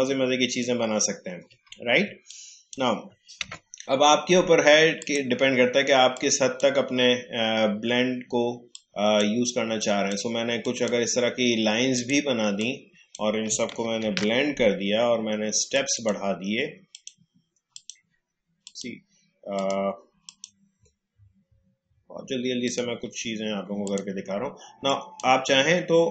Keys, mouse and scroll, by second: 0.4-0.9 alt+scroll down 1, 1.6 space, 2.2 click, 3.4 Delete, 5.0-8.8 drag, 8.8-14.1 drag, 14.0 ctrl+alt+b, 15.7 click, 20.7-22.6 scroll up 1, 22.6-26.1 drag.